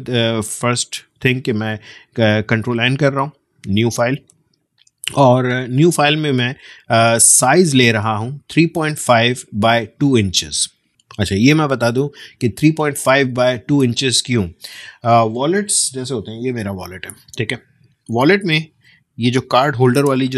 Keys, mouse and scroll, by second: 0.5 ctrl+n, 6.1-9.7 drag.